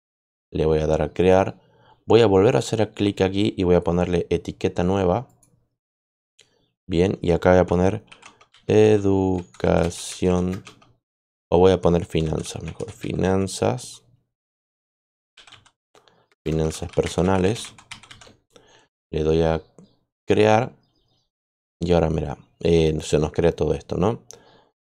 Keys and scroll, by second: 7.7-13.6 typing, 14.8-18.5 typing.